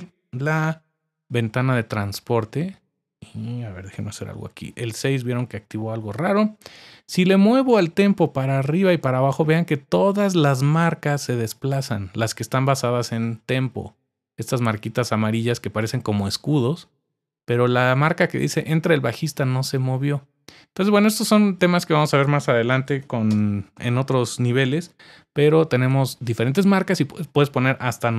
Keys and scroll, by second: 0.4 super+1, 3.9 6, 6.0 typing, 22.5-23.5 typing.